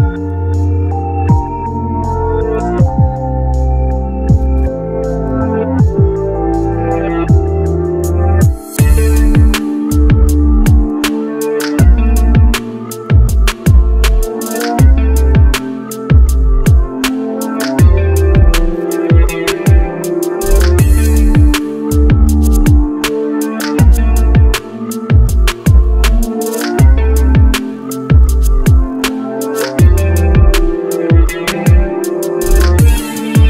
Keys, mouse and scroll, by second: 2.7-3.1 scroll down 1, 3.1-3.4 scroll up 1, 11.0 double click.